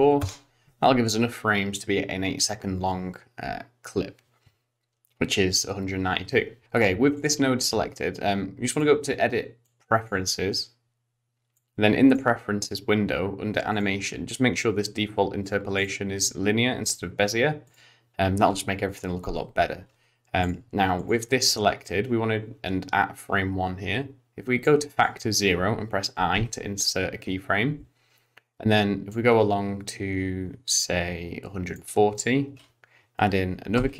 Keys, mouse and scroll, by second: 6.6 ctrl+z, 6.6 click, 7.1 click, 8.7 click, 21.0 click, 24.7 click, 26.3 i, 29.1 click, 33.8 i.